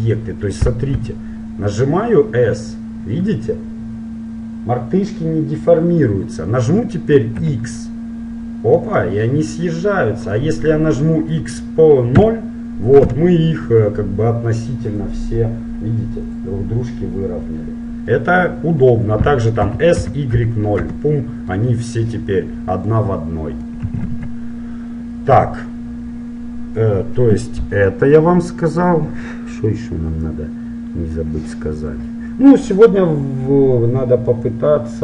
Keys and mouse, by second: 1.1 s, 19.7 s, 21.7 middle click, 24.3 ctrl+z.